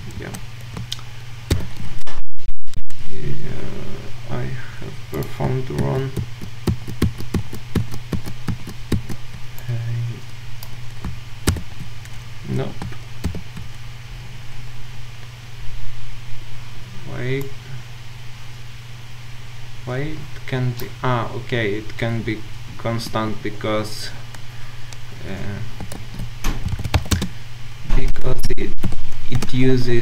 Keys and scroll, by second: 1.5 ctrl+alt+super+c, 5.8 ctrl+w, 11.5 ctrl+w, 13.2 ctrl+alt+super+c, 13.5 ctrl+alt+super+v, 25.9 Escape, 26.0 ctrl+a.